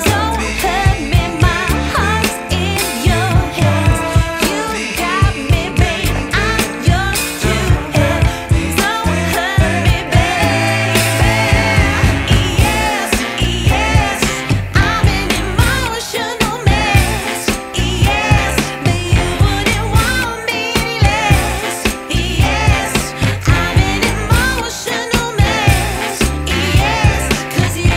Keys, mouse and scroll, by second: 0.4 shift+Right, 1.9 shift+Left, 3.1 middle click, 3.8 scroll up 6, 4.8 ctrl+s, 5.0-6.2 scroll down 5, 6.2-8.1 middle drag, 8.1 click, 8.9-18.2 drag, 18.9-22.0 drag, 22.1 ctrl+z, 22.6-23.7 middle drag, 23.7-24.5 scroll down 1, 24.5 scroll down 1, 24.5-26.4 drag, 26.4 scroll up 1, 26.6-27.2 scroll down 1, 27.2 space.